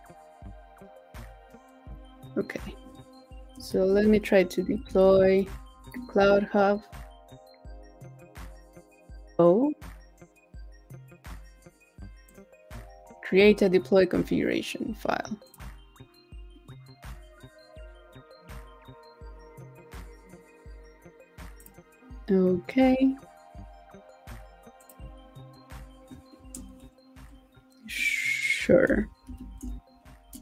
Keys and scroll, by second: 3.7 shift+super+p, 29.3 shift+super+p.